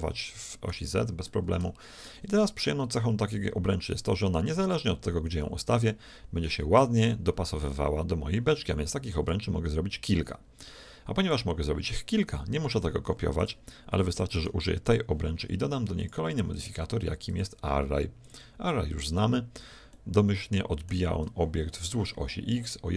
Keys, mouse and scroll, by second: 0.1-3.2 middle drag, 0.8 z, 4.0-5.9 drag, 13.0 x, 14.4-16.3 right drag, 16.0-19.0 drag, 19.9-21.7 middle drag.